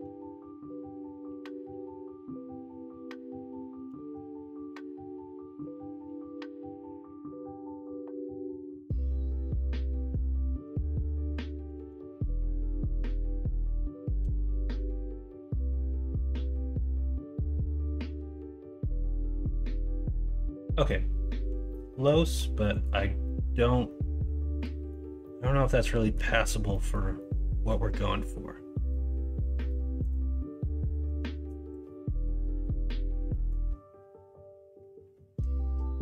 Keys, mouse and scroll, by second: 0.1 alt+z, 0.4-1.6 middle drag, 3.7 ctrl+z, 4.3 middle click, 4.9 middle click, 5.9-7.8 middle drag, 8.0 middle click, 9.0 Tab, 9.4-10.1 middle drag, 11.7 ctrl+s, 14.3 ctrl+KP_Subtract, 15.5 middle click, 15.9-16.3 middle drag, 17.3 middle drag, 17.7 Tab, 18.3 Tab, 18.7 middle click, 19.6 middle drag, 20.3 middle drag, 23.2 middle drag, 23.8-24.9 middle drag, 25.2-26.1 middle drag, 26.7 middle drag, 27.1-27.6 middle drag, 28.2-28.9 middle drag, 29.6 middle click.